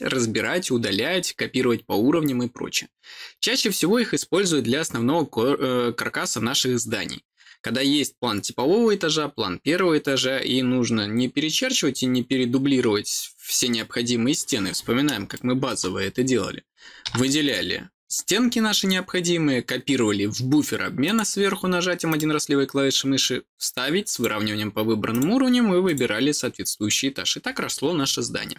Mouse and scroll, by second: 15.3 middle click, 15.9 middle click, 17.4 click, 21.0 click, 22.0 click, 24.0 click, 25.0 click, 25.8 click.